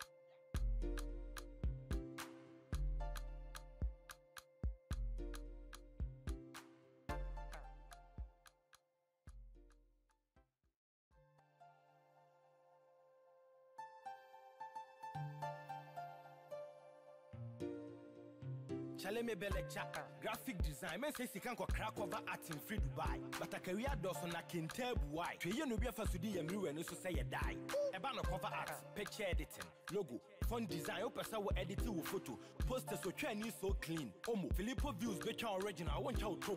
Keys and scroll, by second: 1.1 ctrl+t, 6.3 Return, 11.6 ctrl+Return, 15.0 ctrl+t, 20.9 Return, 21.2 ctrl+].